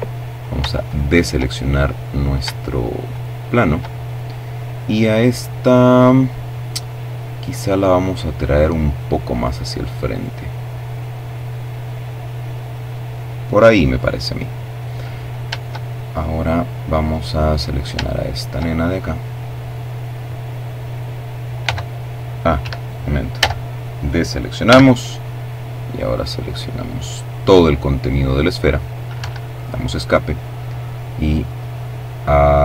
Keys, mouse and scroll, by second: 0.2 shift+middle click, 1.0-1.5 scroll up 3, 1.8 shift+right click, 3.2-5.4 middle drag, 6.9-9.4 drag, 14.5-16.2 shift+middle drag, 16.8 shift+middle click, 17.4 shift+middle click, 20.3 c, 21.4 Escape, 23.3 c, 23.8-27.9 drag, 27.8 Escape, 29.6-32.6 drag.